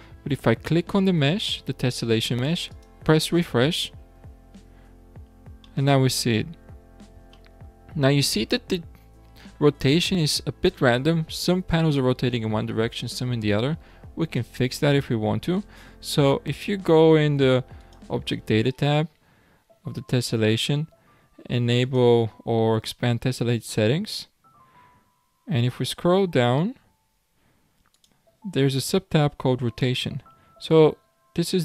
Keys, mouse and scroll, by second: 2.8-5.1 drag, 5.1-5.7 scroll down 3, 5.7-6.7 middle drag, 6.7-7.4 scroll down 3, 7.4-8.2 shift+middle drag, 8.2 scroll up 3, 17.8 click, 21.8-23.2 drag, 23.2-23.7 scroll down 8, 25.3 scroll down 2, 27.9-29.5 drag, 29.5-30.2 scroll down 3.